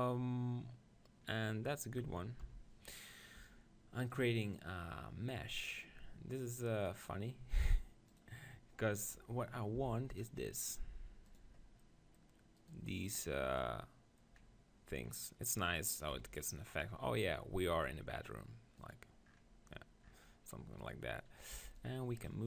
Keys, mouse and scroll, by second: 2.4 KP_1, 4.3-6.0 drag, 9.8 g, 11.3-13.4 drag, 12.6-14.5 right drag, 14.5-16.2 middle drag, 16.1 KP_1, 18.8-20.6 drag, 20.6 middle click, 20.9-22.4 right drag, 21.5 b.